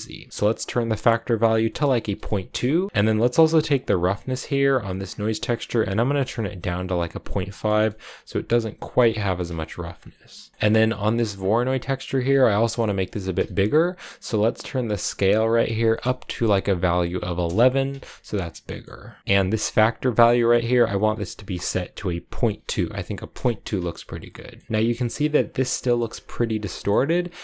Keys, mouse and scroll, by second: 0.0-2.8 drag, 2.9-4.8 scroll up 5, 4.8-8.0 drag, 9.8 scroll down 2, 9.9 middle click, 10.5 scroll down 2, 10.5-11.1 scroll up 3, 11.1 click, 15.1-16.3 drag, 16.3 1, 18.5-20.9 middle drag, 20.9-23.9 drag, 24.0 scroll up 1, 24.1 middle click, 24.6 scroll down 2, 24.8-25.9 shift+middle drag, 25.9-26.6 scroll up 1, 26.6-27.4 shift+middle drag.